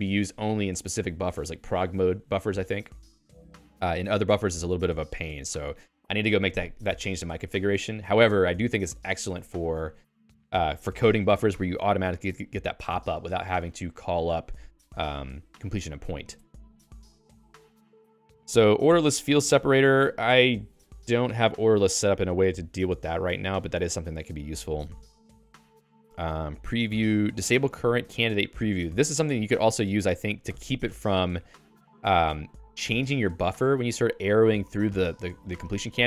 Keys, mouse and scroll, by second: 10.6 i, 12.2 Down, 12.4 Down, 12.6 Down, 13.2 Down, 13.6 Down, 14.0 Down, 15.0 Down, 17.2 d, 17.6 d, 29.4 x, 29.6 x, 30.6 ctrl+alt+x.